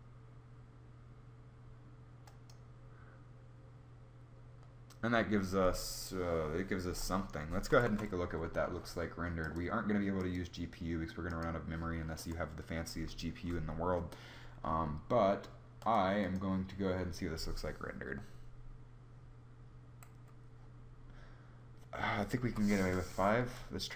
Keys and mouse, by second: 7.5 z, 7.7 z, 23.3 F12.